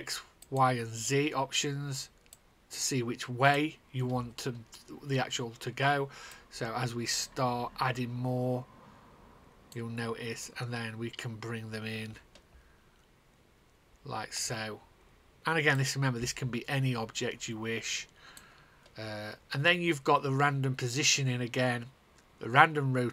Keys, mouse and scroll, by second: 11.8 click, 15.7 click, 16.3 click.